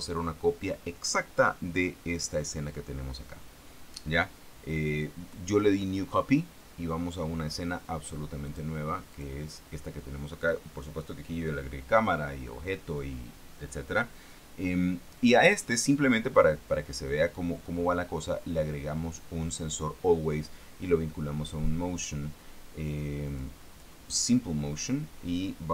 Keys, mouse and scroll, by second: 8.8 click, 9.4 click, 16.6 scroll up 1, 17.5-22.8 scroll down 2, 23.7 click.